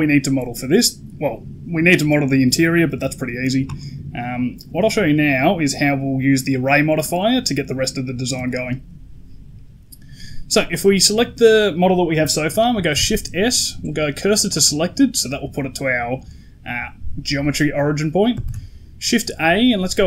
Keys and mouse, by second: 4.9 middle click, 8.3 shift+middle click, 10.6 right click, 12.8 shift+s, 18.3 shift+a.